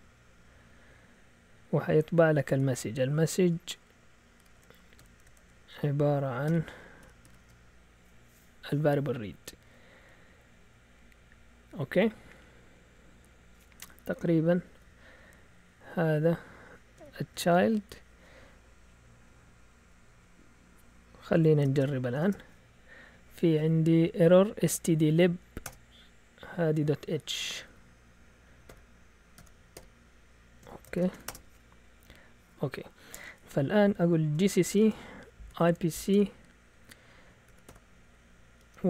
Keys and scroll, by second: 4.3-4.9 typing, 5.3 shift+Tab, 6.2-7.8 typing, 14.4 Down, 14.6 Down, 14.7 Down, 15.4 Down, 15.9 Down, 16.9 Escape, 17.3 typing, 18.8-19.8 Up, 20.0 Up, 21.3 Escape, 21.7-22.1 typing, 22.1 Return, 25.5 Return, 26.7 Right, 26.9 Right, 27.1 Right, 27.2 Right, 27.4 Right, 27.5 Right, 27.6 Right, 28.6-32.7 typing, 34.0-36.0 typing, 37.4-38.8 typing.